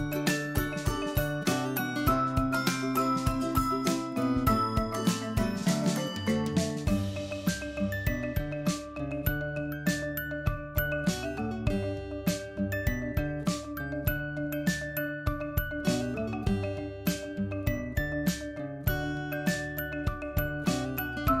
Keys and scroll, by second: 4.5 ctrl+Left, 11.6 ctrl+Left, 16.1 ctrl+Right.